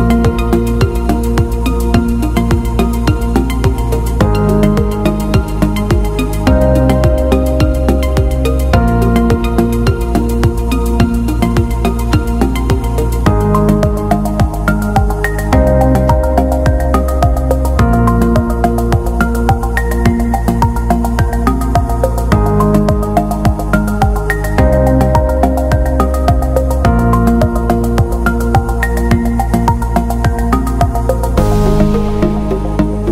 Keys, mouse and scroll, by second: 7.3 ], 9.4 typing, 9.5 click, 19.3 alt+click, 20.3 click, 29.4 click, 30.7-31.1 alt+scroll up 1, 31.9 click.